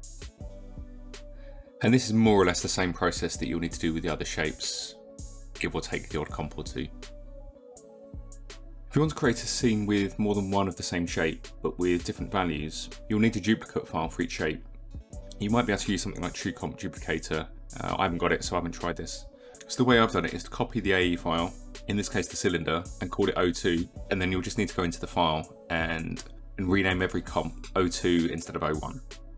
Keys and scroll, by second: 3.8 KP_1, 3.9 Return, 7.2 KP_1, 7.4 Return, 17.5 Return.